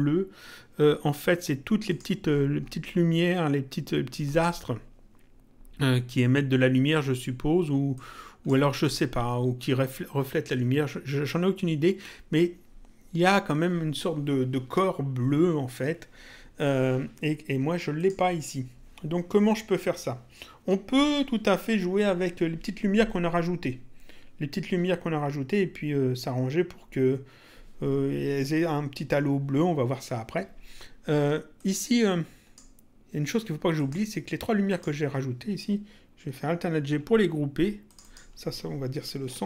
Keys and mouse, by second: 1.9 click, 4.3 click, 8.0 click, 18.0 click, 31.6 click, 33.8 click, 34.6 click, 36.8 alt+g, 39.0-39.4 typing.